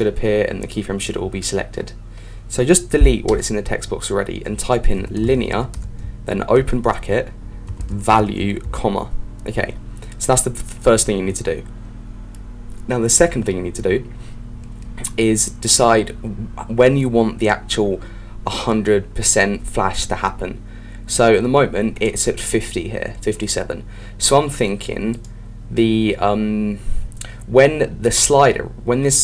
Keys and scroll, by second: 6.5 shift+9.